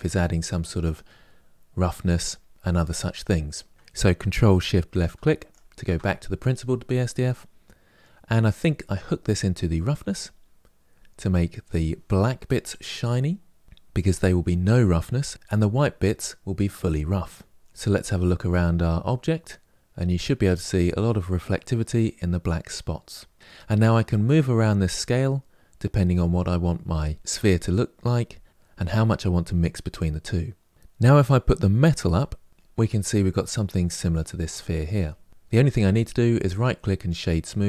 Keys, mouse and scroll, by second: 0.1-5.3 middle drag, 5.3 ctrl+shift+click, 8.3 click, 17.5-20.1 middle drag, 24.0-26.9 drag, 30.7 middle click, 31.5-32.9 drag, 32.9-33.3 scroll down 1, 33.3-36.9 middle drag, 36.9-37.6 right drag.